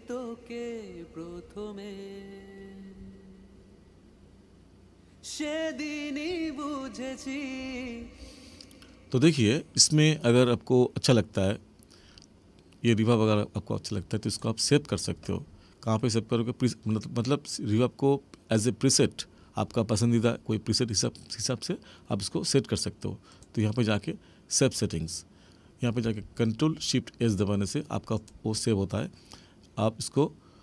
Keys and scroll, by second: 8.0 space.